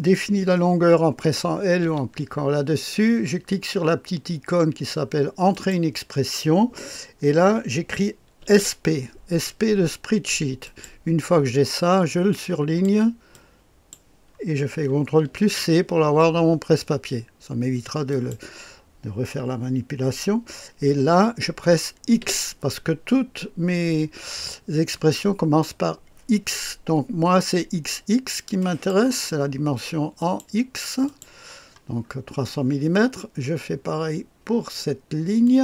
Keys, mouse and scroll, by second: 1.8 i, 5.5 click, 8.1-9.1 typing, 10.6 click, 12.1-13.2 drag, 13.3 click, 15.3 ctrl+c, 18.1 click, 22.2 x, 28.6 click, 30.2 click, 30.8 click, 32.0-35.4 scroll down 1, 35.4 click.